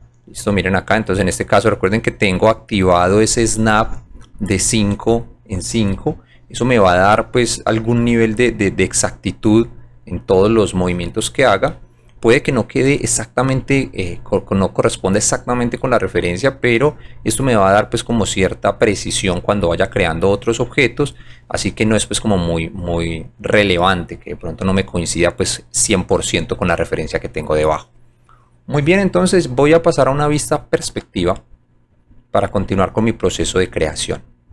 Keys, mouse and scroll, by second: 1.9 click, 6.7-7.1 drag, 8.4 click, 10.7-11.0 scroll down 1, 11.7 scroll up 1, 13.8 scroll up 1, 16.1-17.0 scroll down 2, 22.4 scroll up 1, 26.2-27.0 scroll down 4, 31.3 alt+right click, 32.1 alt+middle click, 32.6 alt+right click, 33.3 scroll down 1, 33.9 alt+middle click.